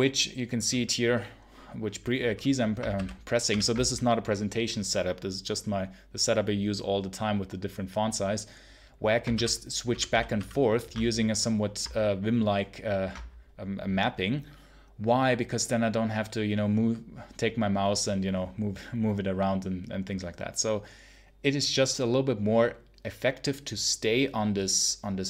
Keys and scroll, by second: 2.8 ctrl+super+h, 3.3 ctrl+super+l, 9.2 ctrl+super+h, 9.8 ctrl+super+l, 10.2 ctrl+h.